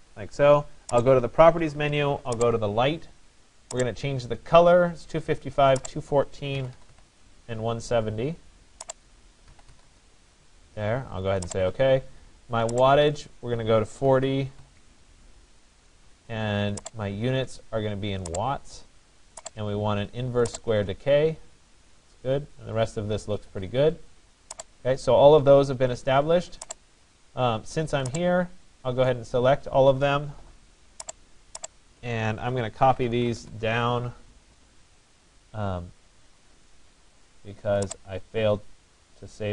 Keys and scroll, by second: 6.3-7.4 typing, 9.3-10.4 typing, 13.8 4, 33.0 Return.